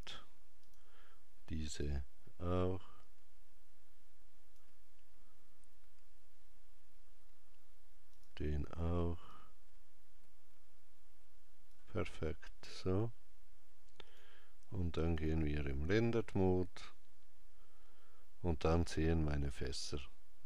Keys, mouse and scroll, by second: 8.0 click, 13.8 click.